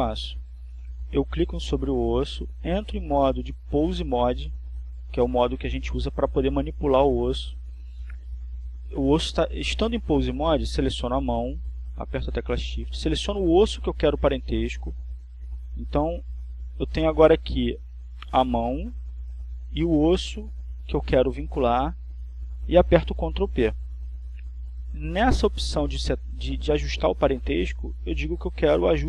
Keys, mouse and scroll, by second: 4.5 right click, 7.7 click, 8.7 click, 15.0 right click, 17.8 shift+right click, 28.0 ctrl+p.